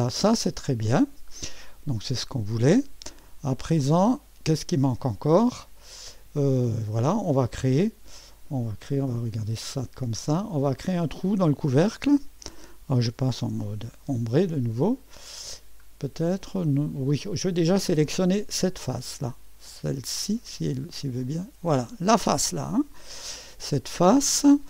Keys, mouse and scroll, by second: 3.6-5.2 drag, 3.9 space, 5.9 typing, 6.5 click, 7.0 typing, 9.4 typing, 10.3-10.8 scroll up 1, 10.8 middle click, 12.5 click, 13.5 typing, 14.5 middle click, 15.4-16.2 scroll down 1, 16.2-19.0 scroll up 1, 20.5-24.3 drag.